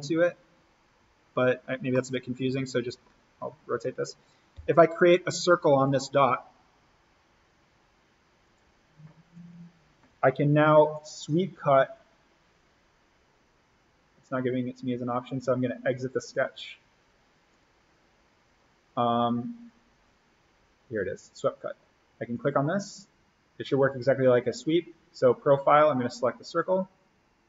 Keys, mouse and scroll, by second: 0.0-0.5 scroll down 1, 1.2-1.5 scroll up 1, 1.9-3.2 middle drag, 3.2-3.6 scroll up 1, 3.6-4.6 scroll down 1, 4.6 o, 5.7 click, 9.4 Escape, 10.9 click, 16.1 click, 23.0 click, 26.5 click.